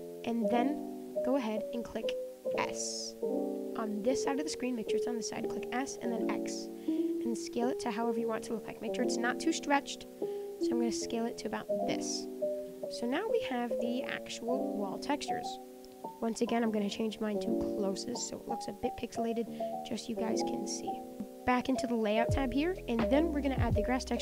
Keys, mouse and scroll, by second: 0.6-4.8 drag, 11.8-13.5 middle drag, 13.7-15.7 middle drag, 18.3-18.8 drag, 19.4-21.1 middle drag, 21.1 middle click, 21.5 click, 22.0-23.0 middle drag, 23.0-23.6 scroll down 2, 23.6 click, 24.0-24.2 shift+middle drag.